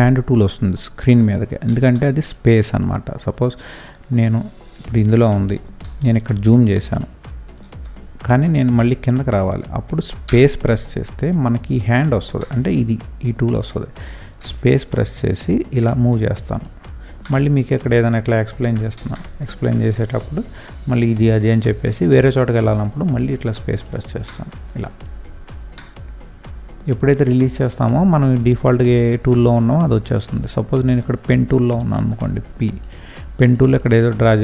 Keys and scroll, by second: 1.6 space, 5.8 ctrl+space, 6.3 ctrl+space, 10.2 space, 14.4 space, 18.9 space, 22.6 space.